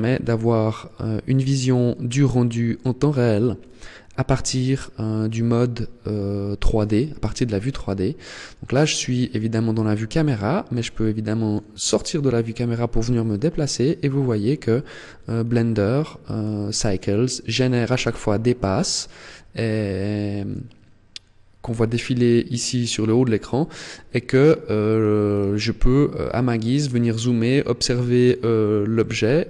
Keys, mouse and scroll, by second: 6.6-7.4 scroll up 2, 9.8 middle click, 11.7-12.4 scroll up 7, 14.9-15.6 scroll up 9, 16.1 scroll up 1, 23.3 middle click, 24.4-25.2 scroll down 6, 25.7 middle click, 26.9 middle click, 28.7 middle click.